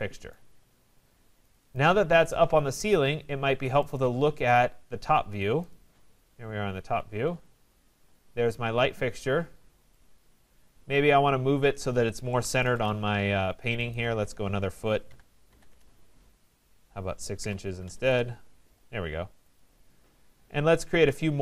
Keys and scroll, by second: 12.7 Return.